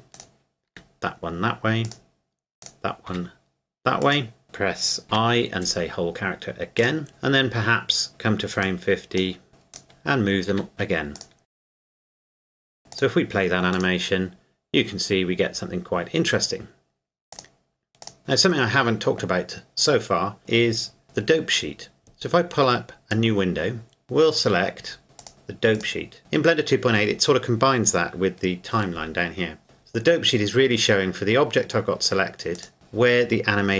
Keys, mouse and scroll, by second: 0.1 right click, 0.7 r, 1.9 click, 2.6 right click, 3.1 r, 4.0 click, 5.1 i, 6.8 click, 8.6 click, 9.7 right click, 10.5 r, 11.1 click, 11.4 right click, 11.5 r, 11.9 right click, 12.1 click, 12.2 r, 12.3 right click, 12.6 click, 17.3 click, 18.1 click, 23.1 click, 25.2 click, 30.0-30.9 scroll up 1, 30.9-32.6 scroll down 1, 32.6 right click.